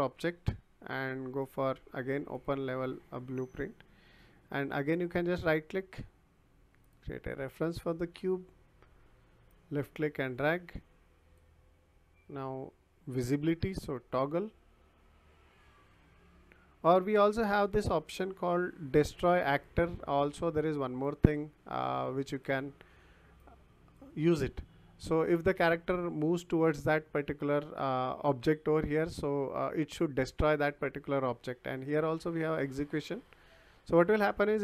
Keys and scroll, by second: 13.8 t, 14.2 o.